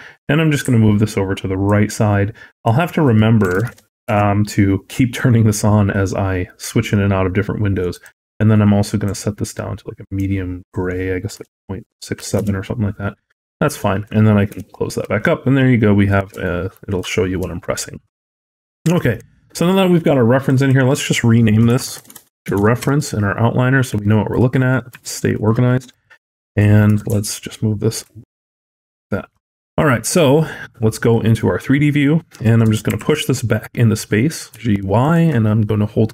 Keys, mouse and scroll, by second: 2.4 click, 7.8 click, 14.3 n, 16.3 shift+middle click, 17.5 shift+middle click, 18.5 shift+middle click, 19.0 click, 20.2 click, 20.4 click, 23.8 shift+middle click, 24.3-24.8 scroll up 2, 24.9 shift+middle click, 25.8 click, 26.7 g, 29.5-30.5 scroll down 3, 30.5 middle click, 32.5 g.